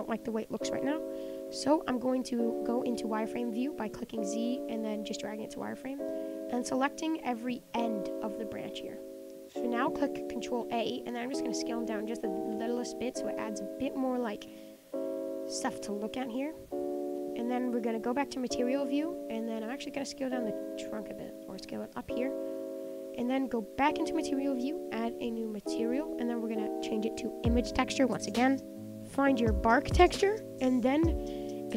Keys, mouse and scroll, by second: 0.4 click, 0.6 scroll up 1, 0.6-1.2 middle drag, 1.2 scroll up 2, 1.4 middle click, 1.7 Tab, 1.8-2.3 scroll down 1, 2.3 click, 4.6 z, 5.2-6.5 middle drag, 6.5 shift+click, 7.5 middle click, 8.1 click, 9.1 middle click, 9.6 scroll down 2, 9.8-11.1 middle drag, 11.1 ctrl+a, 12.5 Tab, 12.8 click, 12.9-14.5 middle drag, 14.5 z, 14.6-15.3 middle drag, 15.3 scroll up 5, 15.5-15.9 middle drag, 15.9 scroll down 3, 16.1-16.6 middle drag, 16.6-18.5 scroll down 2, 18.5 click, 18.7-19.6 middle drag, 19.6 click, 19.7 Tab, 19.8 middle click, 20.3 click, 20.7 ctrl+a, 21.5 Tab, 21.8 click, 21.9-23.0 middle drag, 23.0-23.8 scroll up 3, 23.9 click, 25.8-30.4 drag, 30.6 scroll up 1, 30.7-31.7 middle drag.